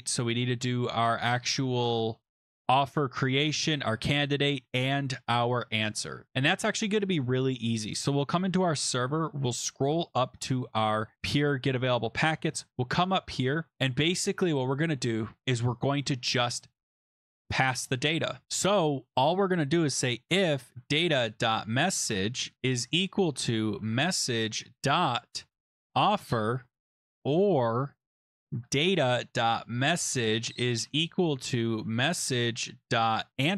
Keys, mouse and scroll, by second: 1.2 scroll, 1.9-2.3 scroll, 3.2-3.9 scroll, 3.9-4.9 scroll, 4.9 scroll, 6.7 click, 8.7-10.0 scroll, 11.7 click, 12.4 Return, 12.6 Return, 12.7 BackSpace, 13.0 BackSpace, 13.2 BackSpace, 13.7 Tab, 17.1 click, 18.4 click, 19.5-33.5 typing.